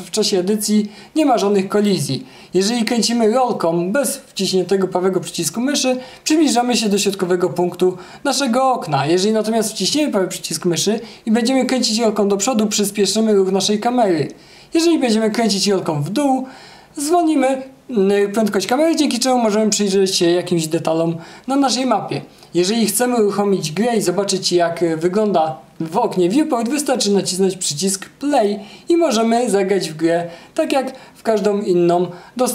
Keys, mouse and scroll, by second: 0.0 q, 1.1-5.2 right drag, 1.5 e, 5.2-5.9 scroll up 2, 6.5-7.5 scroll down 3, 7.8-8.8 scroll up 2, 9.0-9.7 scroll down 2, 9.7 scroll down 1, 10.1-26.5 right drag, 11.0-11.7 scroll up 2, 11.7-13.1 scroll up 1, 13.1 w, 13.7 s, 15.3 w, 17.0-19.1 scroll down 2, 19.1 s, 22.2 w, 24.4 s.